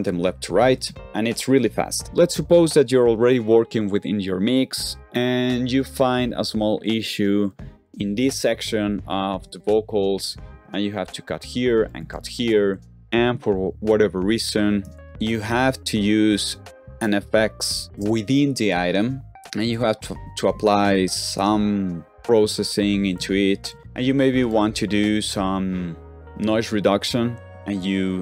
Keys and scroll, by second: 9.2 shift+4, 10.4 super+e, 11.9 super+e, 12.6 super+f, 12.9-15.4 typing, 23.1 super+f, 23.5 typing, 23.6 super+f, 23.8 super+f.